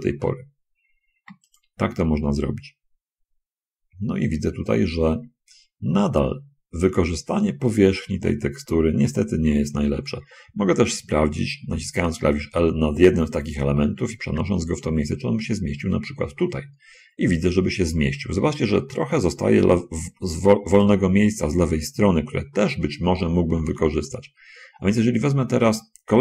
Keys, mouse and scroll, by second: 12.0 l, 14.6 g, 21.1 click, 23.9 k.